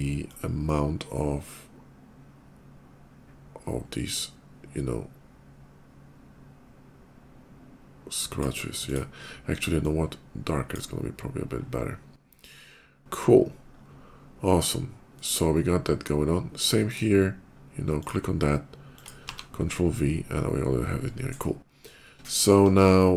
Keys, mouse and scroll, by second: 6.4-8.1 drag, 8.6 click, 9.5-10.6 drag, 13.0 scroll down 1, 13.5 scroll down 1, 14.8 middle click, 16.7 click, 17.8 click, 18.7 click, 19.1 ctrl+v, 19.5 middle click, 19.8 middle click, 21.9 shift+middle click, 23.1 shift+click.